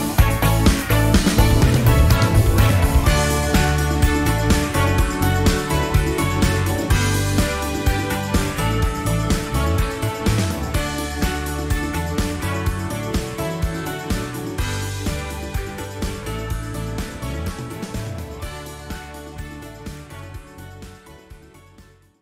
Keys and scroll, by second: 3.6 F1, 4.0 -, 4.0 -, 4.7 +, 5.0 space.